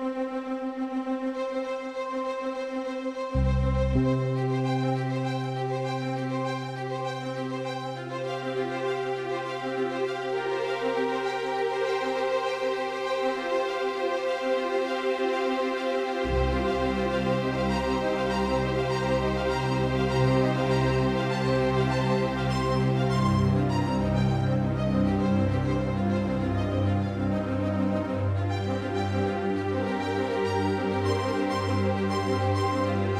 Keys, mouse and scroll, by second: 0.4 Tab, 1.2 Tab, 3.1 a, 7.5 Tab, 8.6 s, 12.0 s, 17.1-19.4 drag, 19.2 s.